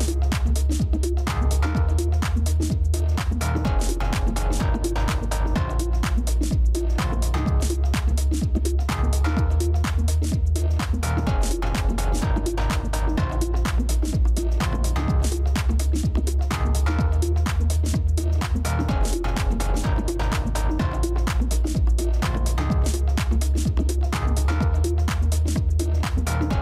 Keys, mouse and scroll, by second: 0.7 ctrl+z, 4.0 shift+click, 8.5 shift+click, 13.5 shift+click, 16.4 shift+click, 17.8 shift+click.